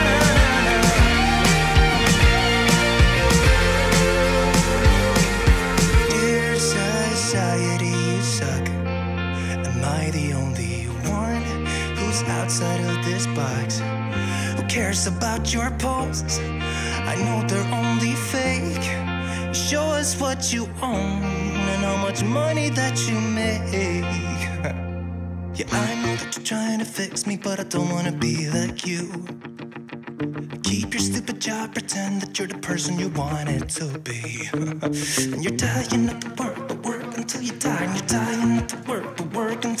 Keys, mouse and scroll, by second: 15.4 click, 24.4 click, 26.7-32.5 drag.